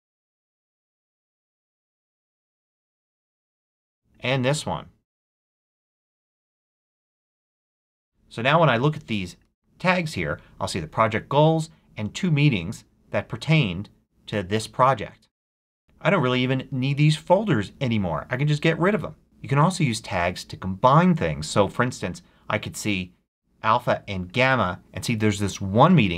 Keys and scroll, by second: 0.3-1.9 typing, 2.2 Return, 5.9-7.6 typing.